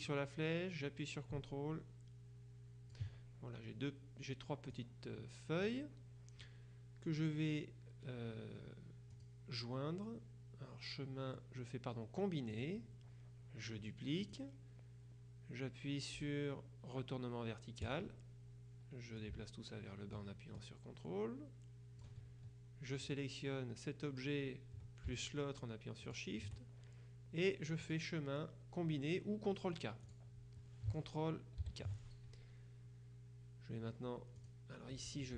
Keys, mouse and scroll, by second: 0.1-3.5 drag, 4.8 click, 9.2 click, 12.6 click, 14.3 click, 17.9 click, 19.3-22.6 ctrl+drag, 23.1 click, 26.1 shift+click, 27.9 click, 30.1 click, 31.7 ctrl+k, 34.5 click.